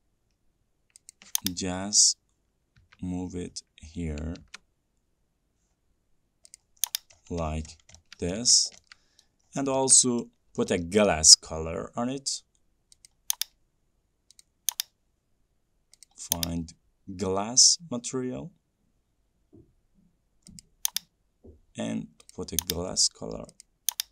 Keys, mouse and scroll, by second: 1.5 click, 3.2 Left, 6.9 click, 7.2-9.2 scroll, 8.7 middle click, 9.6-10.1 scroll, 10.6 scroll, 11.7 scroll, 13.4 click.